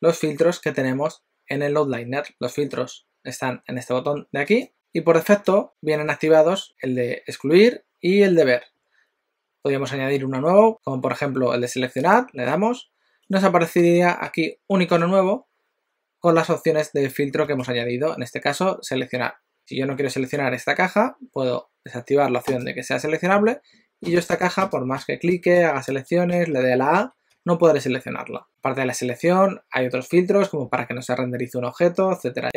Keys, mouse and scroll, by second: 4.5 click, 19.6 click, 22.5 click, 24.0 click, 24.3 click, 24.6 click, 25.7 click, 26.2 click, 26.6 a, 27.0 a, 27.3 a.